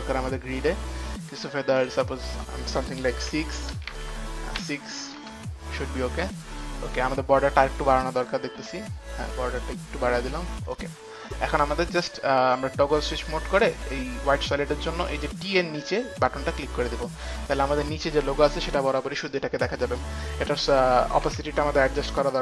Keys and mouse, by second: 0.0 Return, 0.0 click, 0.0 KP_0, 3.5 click, 3.5 KP_6, 4.2 shift+Tab, 4.2 KP_6, 4.8 KP_6, 5.4 shift+Tab, 5.4 Return, 5.4 KP_6, 6.5 click, 7.6 shift+Tab, 7.6 Return, 7.6 click, 7.6 KP_6, 8.3 shift+Tab, 9.0 Return, 9.0 click, 10.9 click, 14.3 click, 16.4 click, 18.4 click, 19.6 click, 21.5 t.